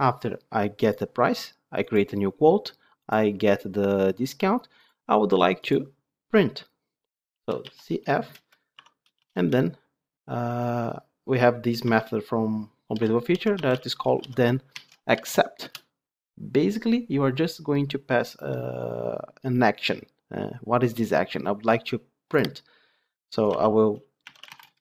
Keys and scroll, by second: 15.6 Return.